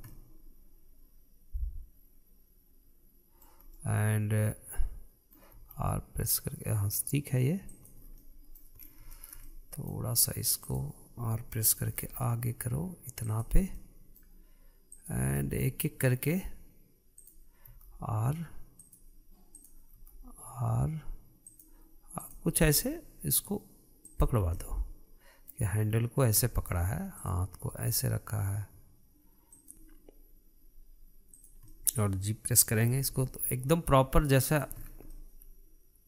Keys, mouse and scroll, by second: 0.5 scroll down 1, 0.7-3.8 middle drag, 4.4-6.2 middle drag, 6.2 r, 8.7 scroll down 1, 8.8-9.4 middle drag, 9.4-9.8 scroll up 3, 9.8-11.3 shift+middle drag, 11.3 drag, 12.5 r, 14.4-15.6 middle drag, 15.6 click, 16.0-17.8 middle drag, 17.8 click, 18.4 r, 20.2 drag, 20.6 r, 22.8 click, 23.2 r, 25.0 scroll down 1, 25.2-26.4 middle drag, 26.4-26.8 scroll up 2, 26.8 scroll down 1, 27.1-27.8 middle drag, 27.8 click, 28.3 r, 32.0 click, 32.3-33.6 middle drag, 33.6 g, 35.4 scroll down 4, 35.8-36.0 middle drag.